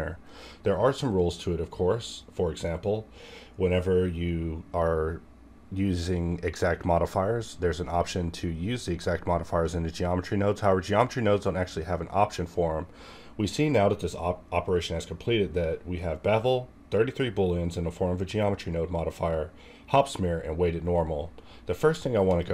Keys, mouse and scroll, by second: 22.4 click.